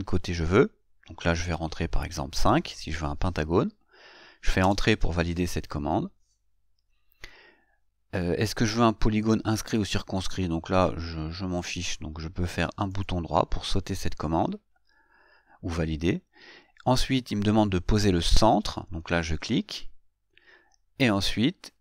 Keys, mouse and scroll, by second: 13.1 right click, 19.5 click.